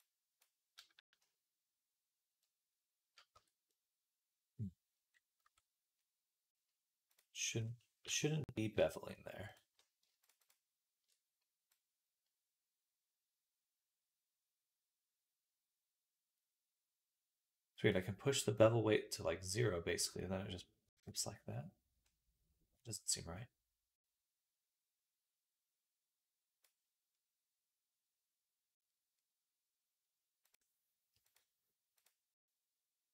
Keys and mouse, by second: 3.2 Tab, 5.3 Tab, 10.1 alt+shift+click, 11.6-33.1 drag, 11.6-33.1 middle drag.